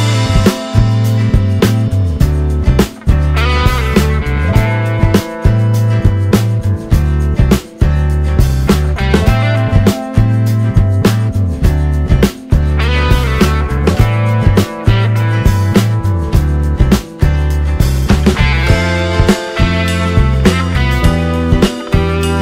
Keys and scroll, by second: 6.2 ctrl+t, 21.5 space.